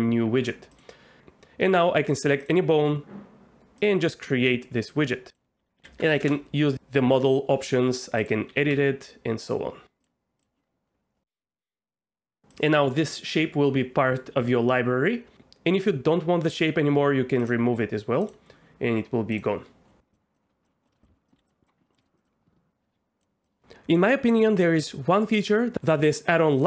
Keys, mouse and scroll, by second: 1.7 Tab, 3.8 click, 5.4 click, 8.2 click, 8.5 g, 8.7 z, 9.4 click, 10.0 click, 12.6-15.3 drag, 15.3 Escape, 16.6-17.7 drag, 18.3-19.4 drag, 21.0 click, 21.3 click, 21.3 s, 21.6 click, 21.9 click, 22.2-23.2 drag.